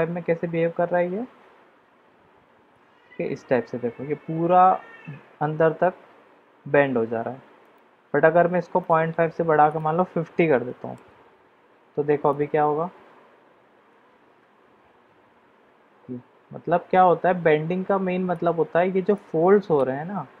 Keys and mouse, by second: 7.8 click, 9.7-11.1 drag, 12.3 click, 18.6 click, 19.4-20.1 middle drag.